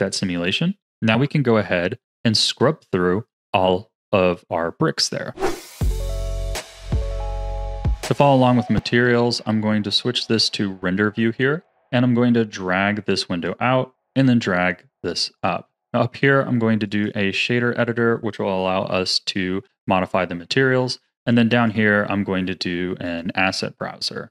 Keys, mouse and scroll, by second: 9.0 click, 9.3 z, 11.7-18.8 drag, 18.8 n, 21.5-24.3 drag.